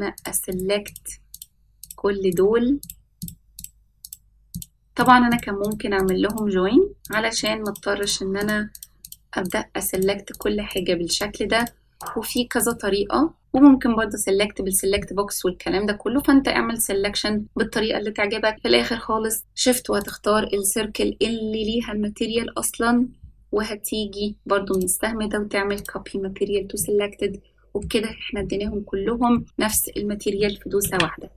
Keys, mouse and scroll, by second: 0.2 shift+click, 0.5 shift+click, 0.9 shift+click, 1.4 shift+click, 1.9 shift+click, 2.3 shift+click, 2.9 shift+click, 3.2 shift+click, 3.6 shift+click, 4.1 shift+click, 4.6 shift+click, 5.0 shift+click, 5.3 shift+click, 5.7 shift+click, 6.0 shift+click, 6.3 shift+click, 7.1 shift+click, 7.4 shift+click, 7.7 shift+click, 8.0 shift+click, 8.4 shift+click, 8.8 shift+click, 9.1 shift+click, 9.5 shift+click, 10.0 shift+click, 10.4 shift+click, 10.7 shift+click, 11.1 shift+click, 11.6 shift+click, 12.0 shift+click, 12.3 shift+click, 12.6 shift+click, 20.0 shift+click, 24.8-25.9 drag, 26.8-27.9 middle drag, 28.1-28.8 scroll down 5, 29.4 middle click, 29.4 scroll down 1, 30.0-30.4 scroll up 1, 30.9 ctrl+s.